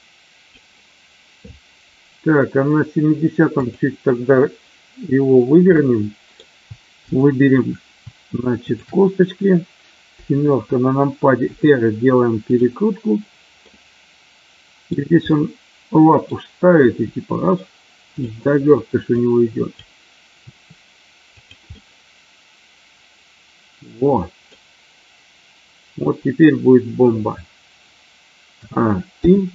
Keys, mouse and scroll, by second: 3.7 click, 5.8-6.4 middle drag, 6.9-7.5 shift+drag, 8.7 shift+click, 11.5 r, 12.5 click, 13.7-14.8 middle drag, 15.3-16.3 middle drag, 16.8 r, 19.0 click, 20.4 r, 21.3 click, 21.8-24.4 middle drag, 28.5 a, 29.0 i.